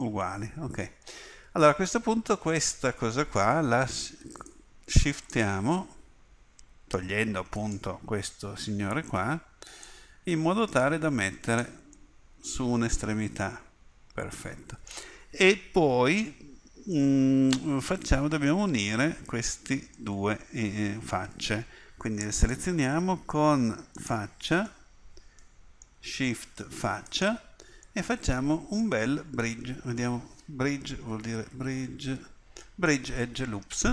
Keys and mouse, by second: 16.9-20.1 middle drag, 30.0 space.